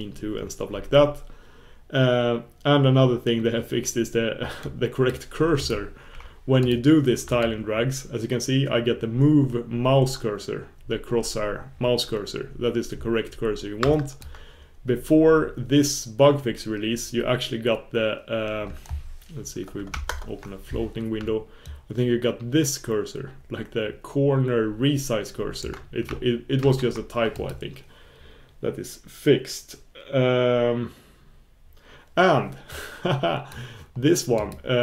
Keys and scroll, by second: 5.6 super+f, 7.6 super+f, 9.0 super+f, 20.1 alt+super+Return, 26.6 shift+super+q, 30.3 shift+super+q.